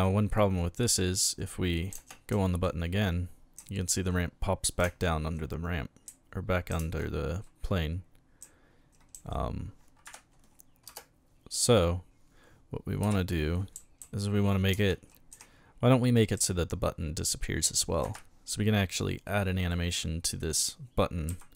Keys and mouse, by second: 1.2 d, 1.9 d, 2.0 space, 2.3 d, 3.6 a, 4.8 d, 4.8 space, 6.1 a, 6.7 d, 6.8 space, 8.4 a, 9.1 d, 10.0 Escape, 13.0-15.3 typing, 16.4 a, 18.0 Escape, 19.2 right click, 19.6 right click.